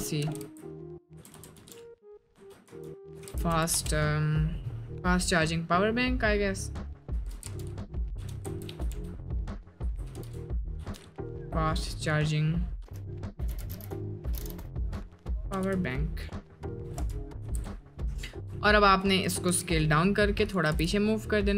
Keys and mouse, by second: 0.2 f, 0.4 a, 1.0 BackSpace, 2.3-3.7 typing, 7.2-10.7 typing, 12.8-15.5 typing, 16.8 b, 17.4 a, 17.5 n, 18.0 k, 18.5 Tab, 19.5 s, 20.7 g.